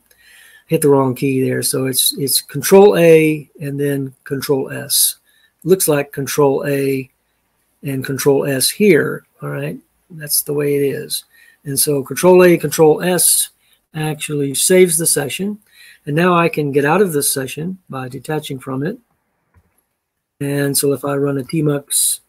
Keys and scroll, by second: 18.4 ctrl+a, 19.3 typing, 21.3-22.2 typing.